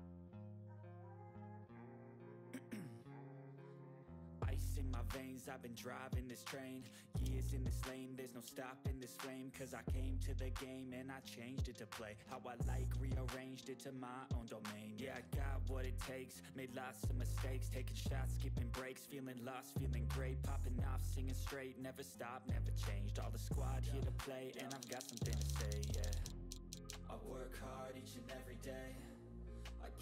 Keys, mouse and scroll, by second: 4.4 click, 7.7-8.1 ctrl+scroll up 1, 8.1 click, 8.5 ctrl+scroll down 1, 9.2 click, 14.3 click, 16.8 click, 21.7 click, 22.8 click, 24.4 click, 24.6 ctrl+z, 27.7 click.